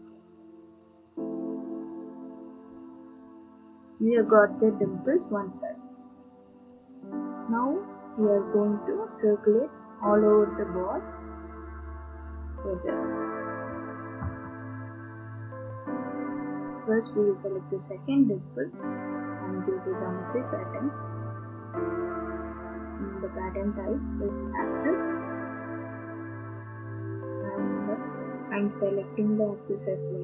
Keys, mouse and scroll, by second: 6.2 middle click, 11.3 middle click, 14.1 ctrl+d, 16.5 click, 19.9 click, 21.3 click, 23.4 click, 24.9 click, 29.8 click.